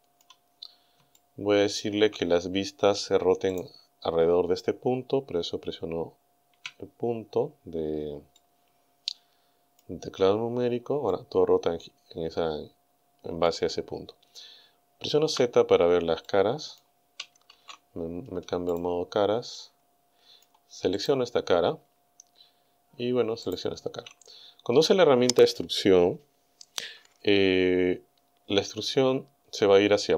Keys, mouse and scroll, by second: 0.2 scroll down 2, 0.3 scroll up 2, 1.2 shift+middle click, 3.5 right click, 6.5 KP_Decimal, 8.4-10.0 shift+middle drag, 10.7-11.0 scroll down 2, 11.1-13.7 middle drag, 15.3 z, 16.3 middle click, 17.5 ctrl+Tab, 18.8 click, 19.5-20.6 middle drag, 21.0 right click, 23.5 shift+right click.